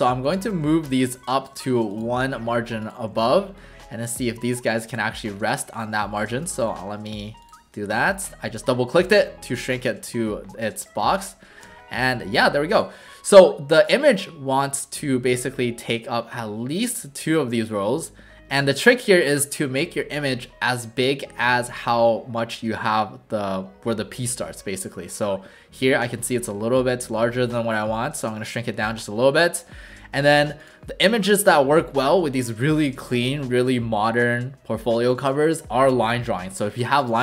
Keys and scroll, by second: 10.1 w, 11.6 w, 26.2 v.